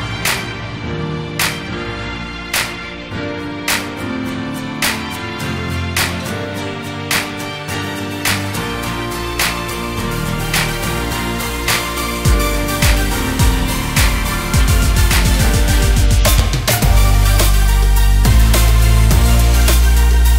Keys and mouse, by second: 1.2-3.7 drag, 5.2-17.8 drag, 19.2 click, 20.1 click.